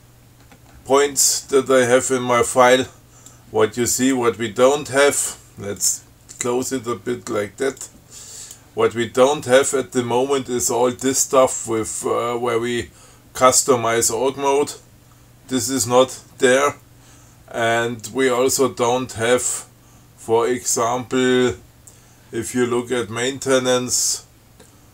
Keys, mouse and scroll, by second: 0.7-1.5 scroll up 2, 1.5-2.1 scroll up 2, 3.6-4.6 drag, 6.1 click, 8.1-9.0 drag, 18.5 scroll down 1, 19.3-19.6 scroll down 2, 19.8 scroll up 2, 20.6 scroll up 1, 23.1-24.2 scroll down 5.